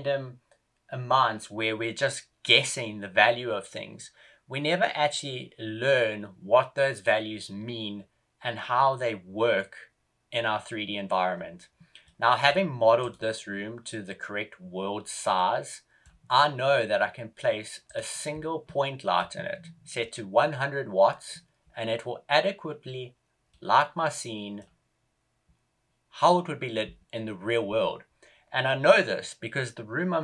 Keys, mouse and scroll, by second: 11.9 middle click, 12.9 right click, 15.2 middle click, 17.8 right click, 18.5 middle click, 23.4 middle click.